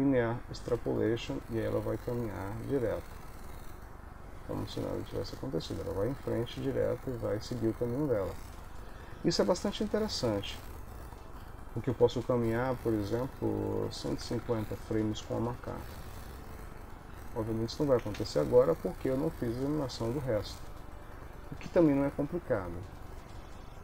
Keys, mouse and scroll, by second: 1.5 click, 9.4 ctrl+s, 10.0 ctrl+middle click, 13.2 click, 15.8 ctrl+middle click, 17.2 ctrl+s, 18.2 space, 20.4 Escape.